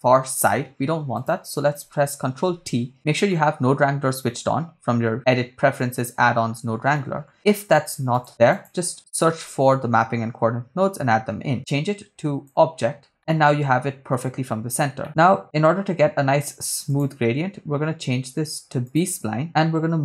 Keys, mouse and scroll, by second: 1.1 click, 2.6 ctrl+t, 3.3 shift+middle click, 3.9-4.4 scroll down 2, 4.4 middle click, 6.6-6.9 scroll up 2, 7.0 middle click, 8.1 click, 8.5 click, 9.4 middle click, 11.6-12.7 drag, 13.1 middle click, 15.0 middle click, 15.0-16.4 scroll up 2, 16.9-19.3 drag.